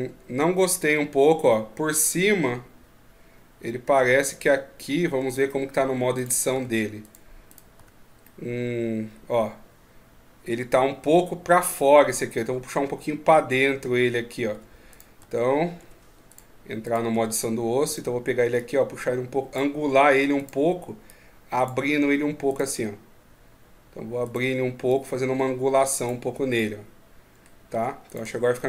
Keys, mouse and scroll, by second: 0.5 middle click, 5.2 scroll down 1, 5.2 middle click, 5.9 right click, 6.3 Tab, 6.8 right click, 7.5 Tab, 8.0 middle click, 14.3 Tab, 14.7 right click, 15.0 Tab, 15.6 Tab, 16.1 right click, 16.6 right click, 16.9 Tab, 17.6 right click, 18.3 click, 20.1 right click, 20.8 click, 22.2 right click, 24.0 right click, 24.7 click, 26.3 middle click, 27.5 Tab, 27.8 right click, 28.0 Tab, 28.3 middle click.